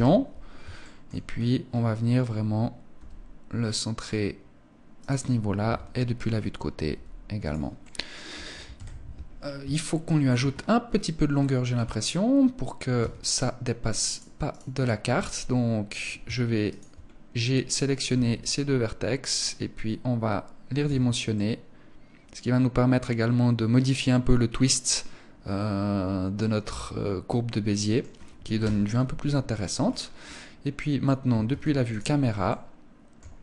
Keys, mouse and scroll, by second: 0.5 shift+middle click, 0.7-1.4 scroll up 8, 2.4 g, 4.6 click, 5.1 KP_3, 6.4 g, 7.0 click, 7.3 middle click, 8.2 KP_1, 8.8-9.4 scroll down 5, 9.3 shift+middle click, 10.0-11.0 scroll down 6, 11.2 scroll up 1, 12.5 Tab, 12.5 scroll up 1, 13.6 right click, 14.0 right click, 16.2 shift+right click, 16.5-17.6 scroll down 1, 17.6 scroll down 1, 17.6 g, 20.4 Tab, 20.4 click, 20.8 middle click, 25.4 scroll down 3, 25.8 middle click, 28.1 KP_0, 28.9-30.2 scroll down 15, 30.1-30.4 scroll up 4, 31.0 ctrl+s, 32.0 shift+middle click.